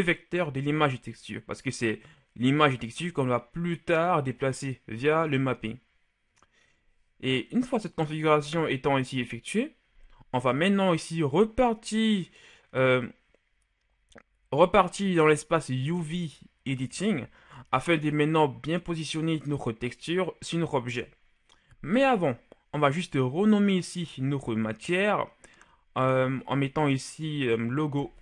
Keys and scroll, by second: 28.0-28.2 typing.